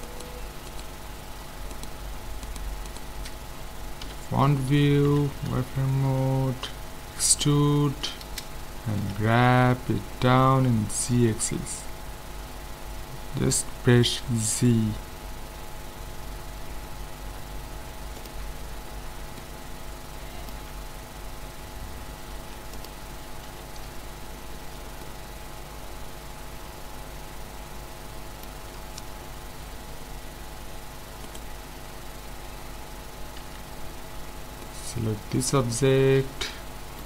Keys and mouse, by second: 0.0-4.6 right drag, 4.0 KP_1, 5.1 z, 5.7 middle click, 7.1 e, 9.0 g, 18.6-20.0 middle drag, 20.7 Tab, 22.4 ctrl+s, 23.5 z, 31.3-32.9 right drag, 33.4 z, 34.6-36.5 middle drag.